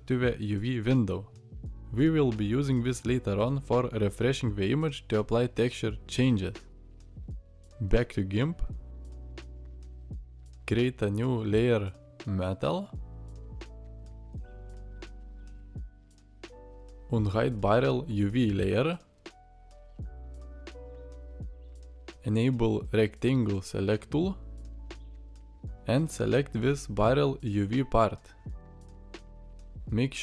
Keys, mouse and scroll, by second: 1.7 click.